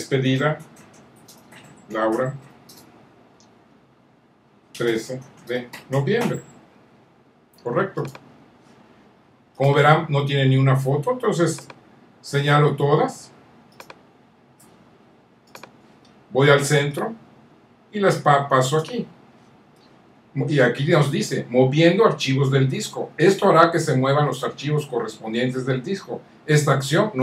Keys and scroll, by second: 0.0-2.9 typing, 4.0-6.8 typing.